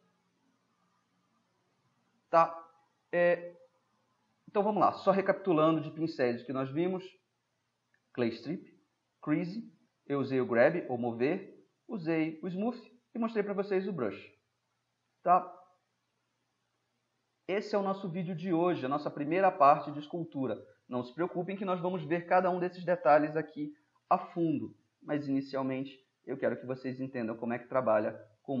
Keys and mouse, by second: 0.7-2.9 middle drag, 3.6-5.5 middle drag, 14.7-15.2 middle drag, 17.1-18.0 middle drag, 25.0-26.4 middle drag, 26.6-27.4 middle drag.